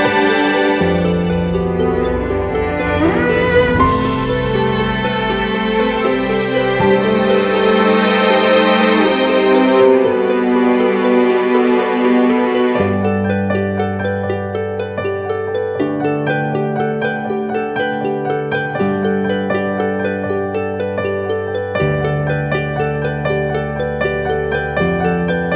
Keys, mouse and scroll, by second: 21.3-22.6 scroll up 1, 22.6 scroll, 22.8 shift+click.